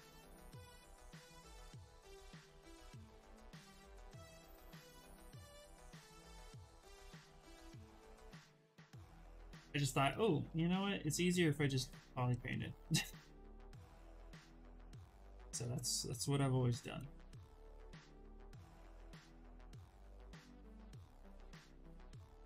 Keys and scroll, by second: 13.0 ctrl+z.